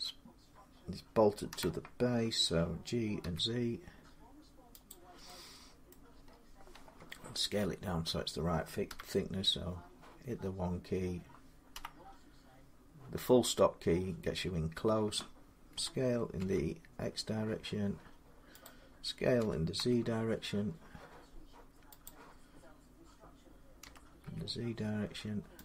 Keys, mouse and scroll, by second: 1.3 g, 1.4 middle click, 3.0 z, 4.7 click, 5.7 middle click, 6.0 scroll down 6, 7.4 shift+middle click, 7.4 scroll up 6, 7.5-8.7 scroll down 5, 8.7 1, 10.2-10.7 scroll up 2, 11.5 KP_Decimal, 12.3 scroll, 12.3 ., 13.2-14.7 scroll down 11, 14.7 middle click, 15.5-16.1 typing, 18.4 click, 19.2-19.5 typing, 20.7-24.0 drag, 23.6 s, 25.5 click.